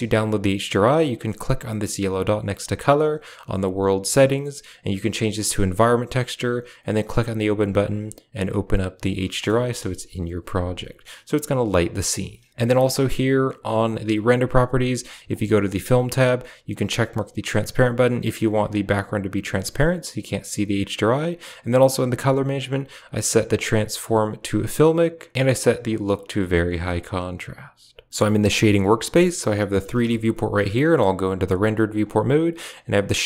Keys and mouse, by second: 1.9-6.5 drag, 9.3 shift+middle click, 9.9 KP_0, 15.2 click, 15.5 click, 16.6 click, 18.8 click, 22.5 click, 25.8 click, 29.9 z, 31.4 click.